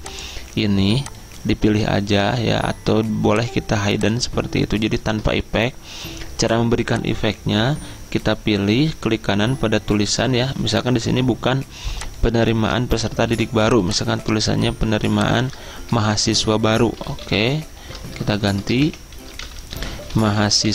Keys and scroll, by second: 13.3 t, 16.8-20.7 typing.